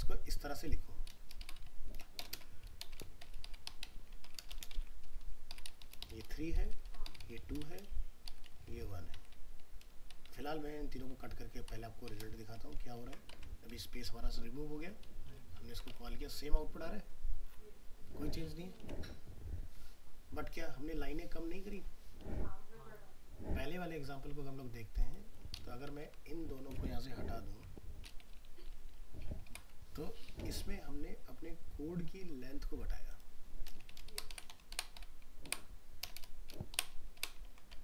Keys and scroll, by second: 4.1 ctrl+c, 4.5 ctrl+Return, 12.4 ctrl+x, 12.8 ctrl+s, 13.4 alt+Tab, 15.3 ctrl+v, 15.6 ctrl+s, 16.0 alt+Tab, 37.5 ctrl+s, 37.7 alt+Tab.